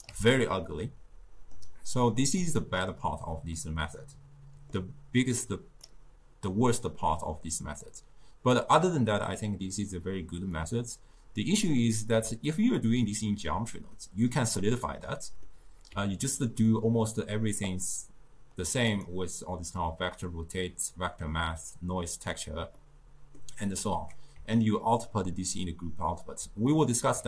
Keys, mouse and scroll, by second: 0.1 d, 0.7-2.4 middle drag, 2.4-3.6 drag, 3.6-5.4 middle drag, 5.4 click, 8.0-10.5 drag, 10.5-12.5 scroll up 1, 12.5-13.9 ctrl+middle drag, 13.9-16.2 scroll up 1, 16.2-17.6 ctrl+middle drag, 17.6-19.1 drag, 21.7 click, 22.8-27.2 middle drag.